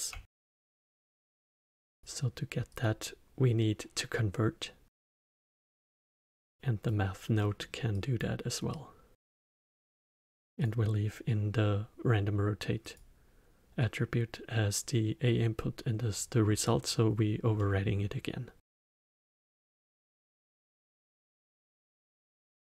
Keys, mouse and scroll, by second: 0.5 shift+d, 2.7-5.7 drag, 6.0-7.4 drag, 7.4-7.9 middle drag, 7.9 click, 8.7-12.9 drag, 17.5-18.7 middle drag, 18.7-22.6 drag.